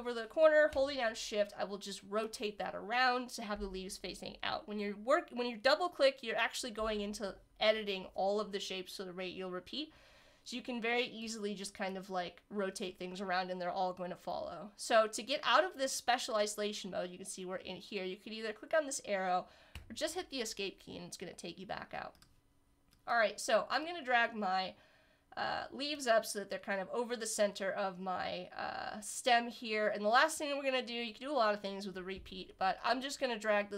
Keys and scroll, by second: 19.7 Escape.